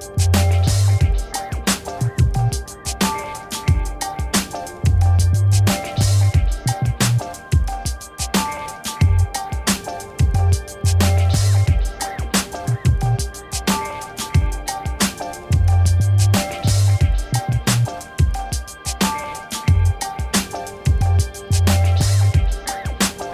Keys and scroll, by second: 5.8 1, 6.6 b, 7.2 3, 7.9 4, 9.0 9.